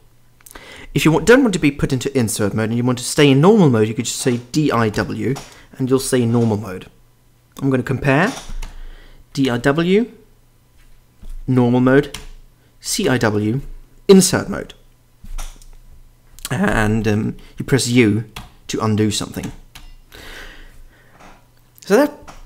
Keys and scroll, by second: 4.3-5.5 typing, 8.6-10.0 typing, 12.1-13.6 typing, 17.1 Escape, 18.3 u, 19.4-19.7 typing.